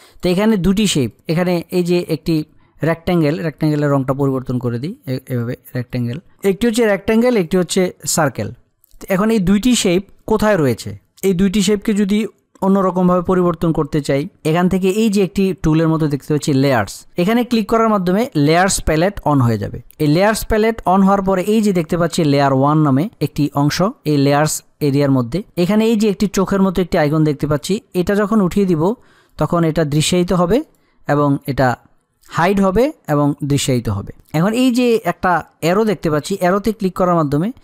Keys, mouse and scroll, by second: 0.7 click, 4.1 click, 17.0 click, 28.0 click, 36.8 click.